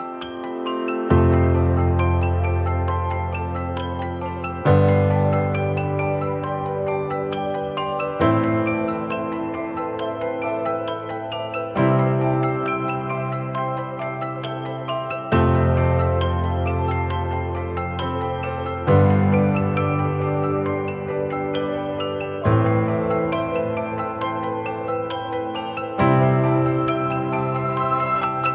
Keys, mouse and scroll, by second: 9.2-9.8 scroll up 1, 9.8 typing, 11.1-11.8 typing, 12.0 ctrl+=, 12.2 ctrl+=, 12.3 ctrl+=, 12.9 space, 13.9 ctrl+-, 14.1 ctrl+-, 16.1 double click, 19.2-21.8 typing, 25.0 typing, 27.8 typing.